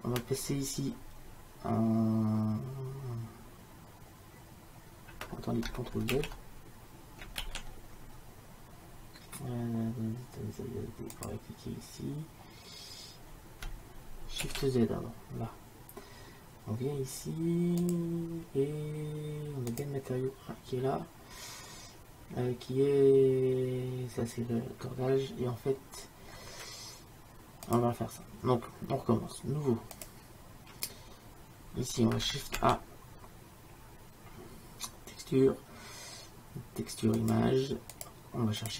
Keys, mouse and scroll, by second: 9.4 ctrl+z, 12.4 ctrl+z, 12.6-14.2 drag, 14.9 shift+z, 15.5 shift+2, 19.7 click, 25.7-27.8 middle drag, 27.8-31.9 drag, 32.8 shift+a, 38.7 click.